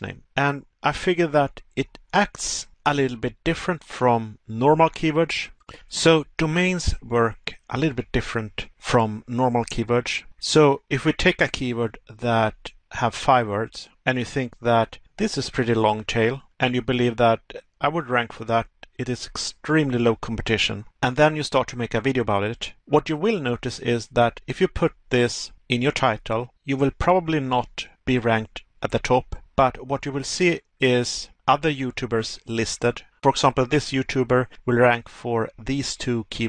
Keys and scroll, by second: 1.5 Pause, 15.9 Pause, 18.6 Pause, 22.7 Pause, 24.6 Pause, 27.1 Pause, 28.3 Pause, 31.1 Pause.